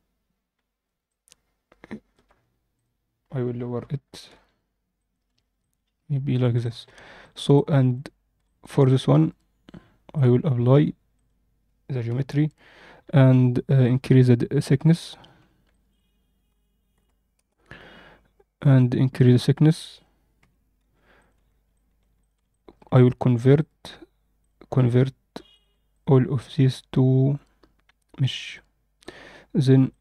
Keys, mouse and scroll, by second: 0.5-1.0 scroll up 2, 1.0-2.0 alt+middle drag, 2.3-2.7 scroll up 1, 2.7 click, 3.7 g, 5.3 alt+a, 5.3 scroll down 2, 5.5-6.3 alt+middle drag, 6.5 alt+shift+middle drag, 7.1 click, 7.5-7.9 alt+middle drag, 8.3 alt+shift+middle drag, 8.8-10.2 right drag, 10.5 alt+a, 11.1 click, 12.0 KP_1, 12.8-13.6 scroll up 1, 13.8 click, 15.6-17.3 shift+drag, 18.1-18.7 scroll down 2, 19.1 click, 20.3 g, 21.3 z, 21.6-22.0 alt+middle drag, 22.1 click, 22.5 alt+shift+middle drag, 23.5-24.4 right drag, 25.4 shift+click, 25.8-28.5 right drag, 28.9 click, 29.8 drag.